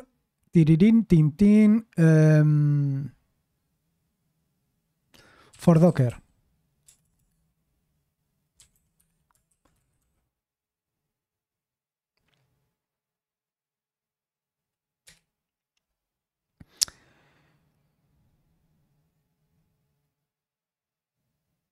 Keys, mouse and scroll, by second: 0.0-0.3 typing, 5.2-7.1 typing, 8.3-10.5 typing, 15.0 Return, 16.4-16.9 scroll down 1, 17.9 scroll down 1.